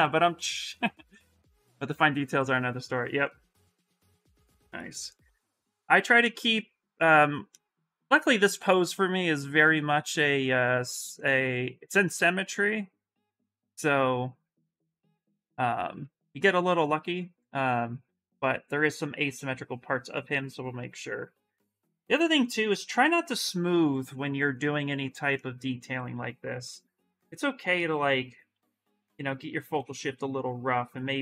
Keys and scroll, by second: 6.4 s, 10.4 s, 25.9 s, 28.4 space, 29.5 s.